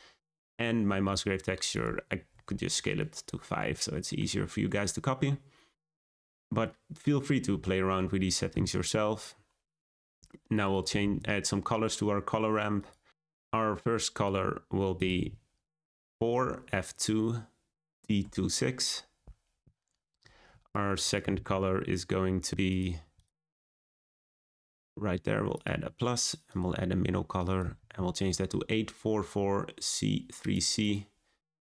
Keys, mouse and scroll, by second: 0.0-1.1 scroll down 1, 2.2-3.0 drag, 12.8 click, 13.1 shift+z, 25.7-29.8 drag.